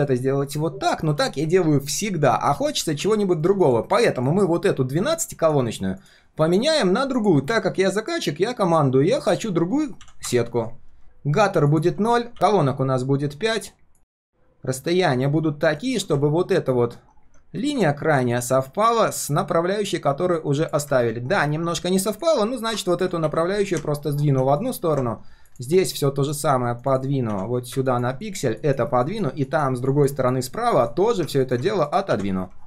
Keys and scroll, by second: 2.5 ctrl+z, 2.8 ctrl+z, 3.3 ctrl+shift+4.